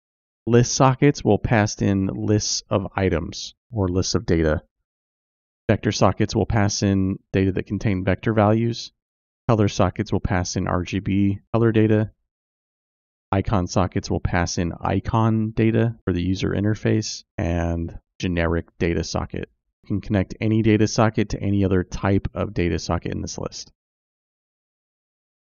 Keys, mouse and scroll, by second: 23.8 click.